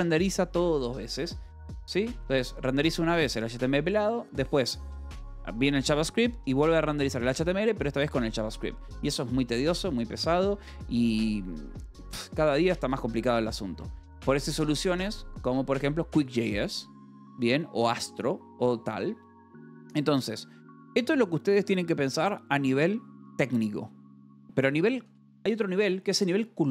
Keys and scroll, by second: 1.6 Escape, 2.0 o, 12.9 space, 13.6 BackSpace, 14.1 Escape, 19.9 a, 20.9 Return, 25.0 =, 25.3 space.